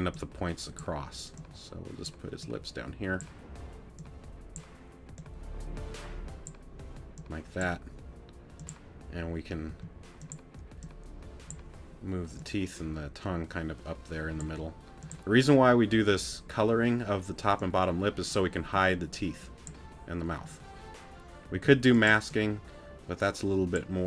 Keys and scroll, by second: 9.7 t, 21.5 t.